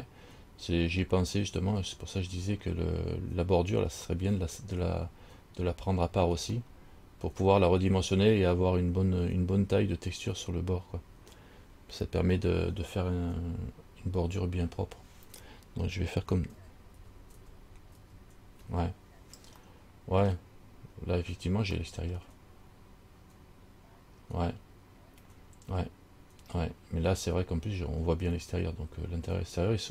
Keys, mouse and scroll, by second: 1.5 middle click, 2.4-4.2 scroll up 3, 4.3 middle click, 4.9 scroll down 1, 6.9 middle click, 16.7 ctrl+z, 17.2 ctrl+z, 17.6 ctrl+z, 18.2 ctrl+z, 19.9 middle click, 22.0 middle click, 24.4-25.1 scroll up 3, 25.3 scroll up 2.